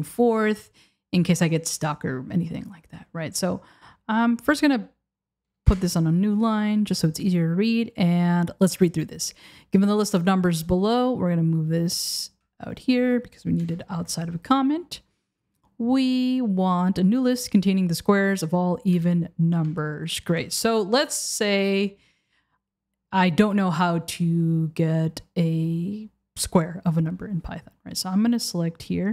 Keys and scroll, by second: 5.7 Return, 12.6 super+c, 13.7 Return, 14.3 super+v, 19.0 Return, 19.7 Return, 20.3 BackSpace, 20.8 BackSpace.